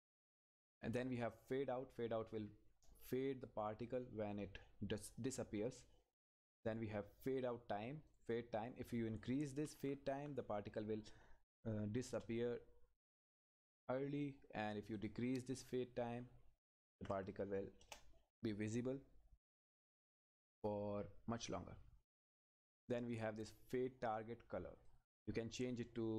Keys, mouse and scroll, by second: 8.1 click, 12.0 Return, 14.9 click, 17.8 Return, 23.1 click.